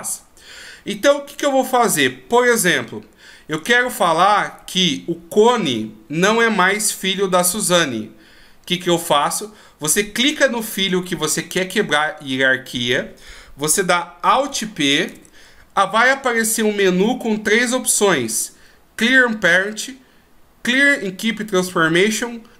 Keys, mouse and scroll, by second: 4.9 right click, 15.4 alt+p.